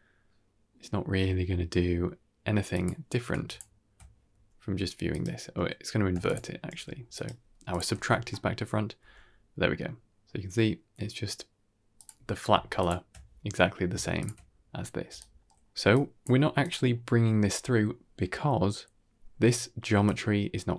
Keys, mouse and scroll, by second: 3.4 ctrl+shift+click, 4.2 g, 6.1 ctrl+shift+click, 6.6 g, 7.6 click, 7.8 alt+s, 8.2-8.5 middle drag, 8.9 g, 12.7 ctrl+shift+click, 14.1 ctrl+shift+click, 14.9 d, 15.1-15.7 drag, 15.1 right click, 15.7 d, 16.0 click, 16.0 middle click, 16.0 d, 16.3-17.0 scroll down 2, 16.7 click, 17.1 g, 19.9-20.7 drag.